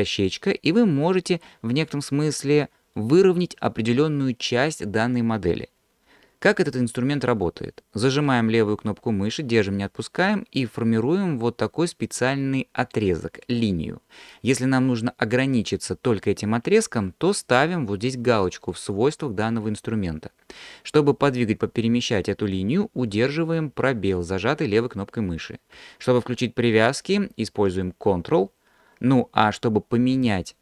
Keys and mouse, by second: 9.3-30.6 drag.